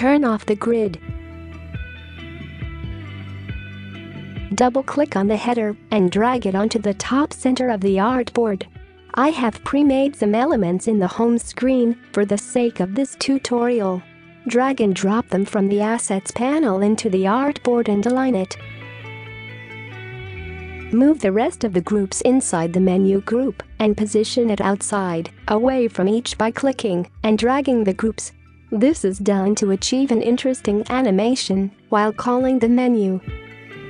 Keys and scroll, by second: 9.8 space, 14.2 space, 19.9-21.5 space, 26.6 ctrl+z, 32.3 space, 33.5-33.8 space.